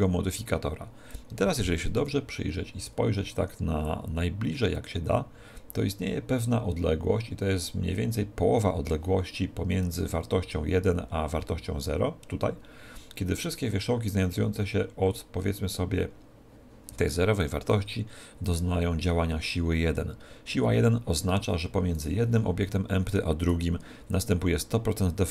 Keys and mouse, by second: 1.8 KP_1, 3.8 click, 21.9-25.3 right drag.